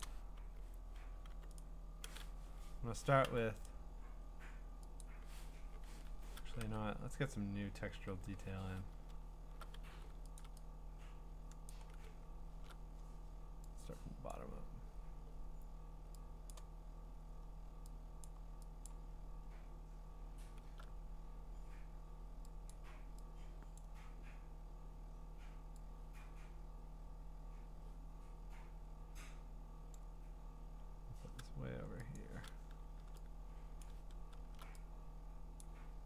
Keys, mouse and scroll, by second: 0.1 click, 1.3 b, 1.6 right click, 2.5 Escape, 3.2 u, 3.7 right click, 5.0 click, 6.1 Escape, 6.6 ctrl+Tab, 7.9 ctrl+Tab, 9.0-9.5 scroll, 9.8 v, 10.4 ctrl+click, 11.7 click, 12.0-12.7 scroll, 14.4 click, 14.6-15.5 scroll, 16.5 click, 17.2 scroll, 18.3 click, 18.9 click, 19.1-19.7 scroll, 20.4-21.9 scroll, 22.7 click, 23.9 click, 29.9 click, 30.7-31.5 scroll down 8, 32.2 click, 32.3 scroll, 33.8 click, 34.1-34.6 scroll, 35.6 click.